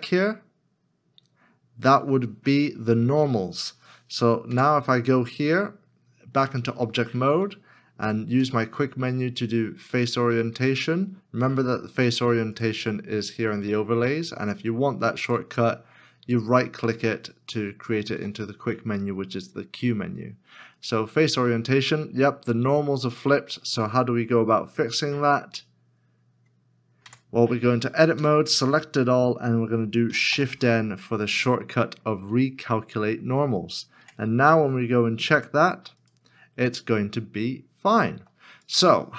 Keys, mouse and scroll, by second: 4.5 Tab, 8.3 q, 18.1 q, 22.7 q, 27.0 q, 28.1 Tab, 30.3 shift+n, 35.6 q, 38.1 q.